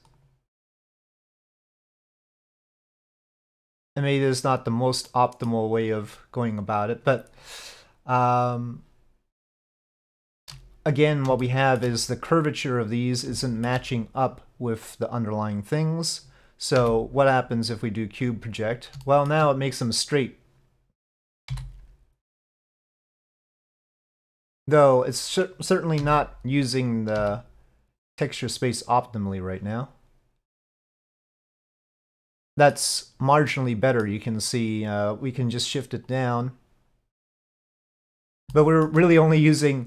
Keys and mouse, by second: 1.0 s, 9.4 click, 10.1 shift+click, 11.5 shift+click, 13.5 shift+click, 17.8 u, 19.1 shift+click, 21.5 g, 23.5 s, 26.0 g, 27.2 s, 36.1 click, 37.6 shift+middle click, 38.6 shift+middle click.